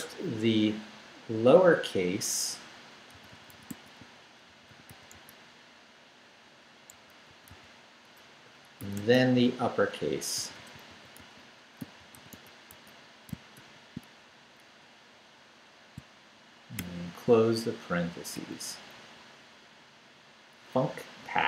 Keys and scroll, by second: 2.9-5.6 typing, 6.7-8.9 typing, 10.1-13.6 typing, 16.8 shift+0, 18.9 Down.